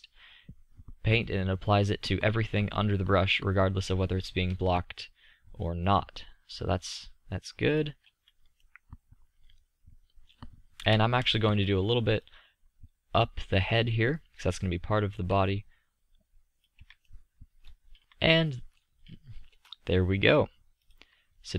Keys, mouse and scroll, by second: 8.6-10.8 middle drag, 10.8 KP_3, 17.3-19.6 middle drag.